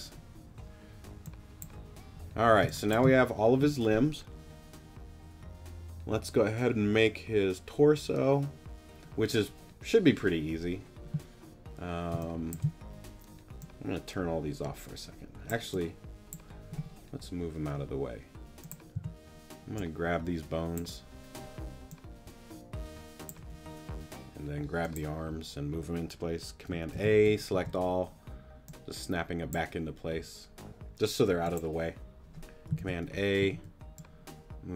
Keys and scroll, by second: 2.6 space, 12.1 space, 18.9 t, 26.9 super+a, 27.5 super+t, 28.0 t, 32.8 super+a, 33.4 super+t, 33.9 t.